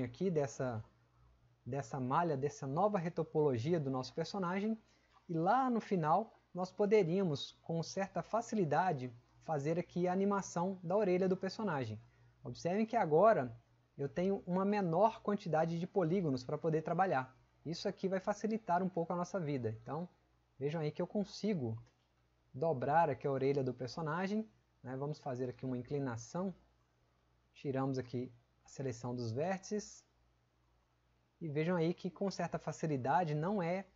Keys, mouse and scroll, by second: 6.2 click, 7.2 click, 8.4 click.